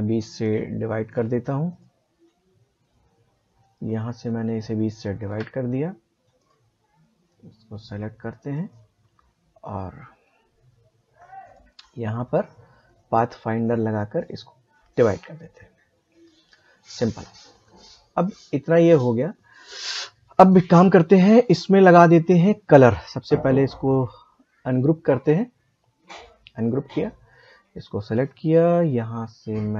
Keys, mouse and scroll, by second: 0.2 click, 3.6 shift+click, 11.4 click, 23.3 right click, 26.1 click.